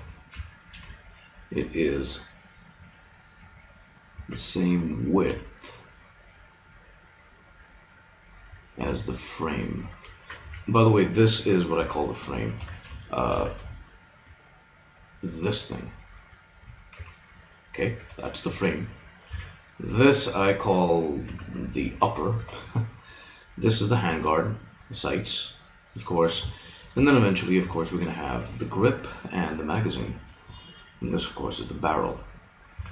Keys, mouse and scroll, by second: 1.3-2.9 middle drag, 4.1 s, 9.0 middle click, 10.5 a, 11.7 KP_3, 12.6 Tab, 13.3 z, 16.9 g, 19.3 a, 19.9-21.7 drag, 21.3 g, 23.1-26.3 right drag, 26.9 KP_3, 28.6-30.3 middle drag, 32.1-32.9 right drag, 32.7 a.